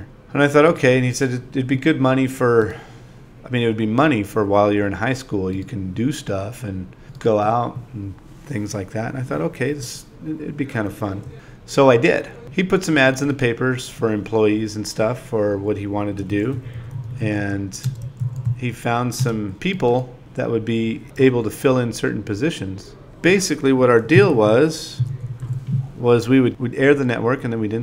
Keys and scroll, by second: 0.8 i, 1.1 shift+s, 1.8 v, 2.2 ,, 4.2 space, 5.6 space, 6.2 2, 6.4 shift+e, 9.1 6, 9.5 super+a, 9.6 2, 11.1 shift+l, 11.7 v, 11.9 4, 14.1 space, 14.4 space, 14.6 2, 16.2 ., 18.9-20.3 typing, 22.9 space, 24.5 7, 25.7 5, 26.1 i.